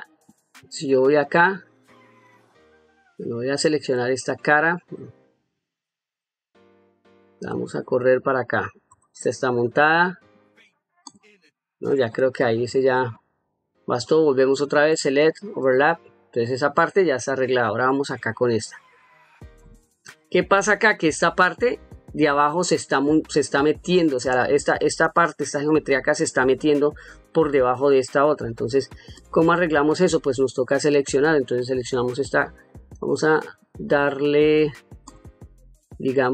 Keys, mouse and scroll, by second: 0.4 1, 1.2 click, 5.3 3, 6.1 click, 7.4 g, 8.9 click, 11.0 click, 12.7 ctrl+middle click, 13.4-14.0 ctrl+middle drag, 14.9-15.7 drag, 17.1 middle click, 18.3 ctrl+middle click, 18.9 ctrl+middle click, 19.8 shift+middle click, 29.1 click, 31.8 click, 32.9 click, 35.0 click.